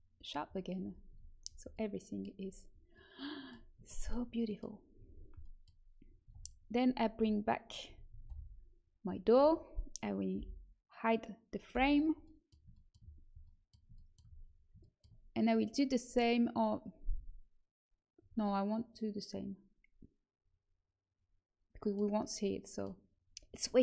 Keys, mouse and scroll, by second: 0.7 a, 1.0 Tab, 6.2 Tab, 7.1 a, 7.8 a, 8.2 alt+h, 9.3 a, 10.3 l, 11.7 h, 12.2-14.0 middle drag, 15.2-20.7 middle drag, 22.3 middle click.